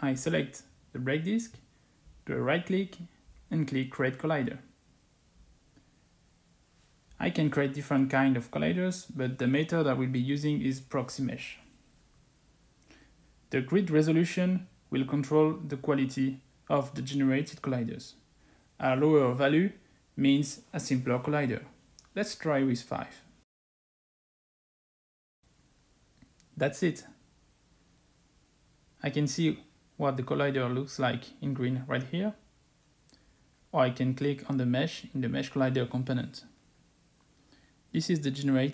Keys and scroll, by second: 19.3 5.